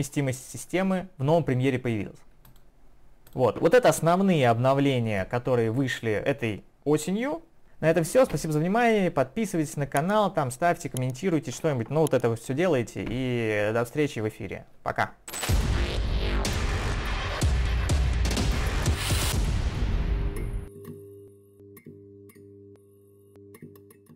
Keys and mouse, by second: 3.3 click.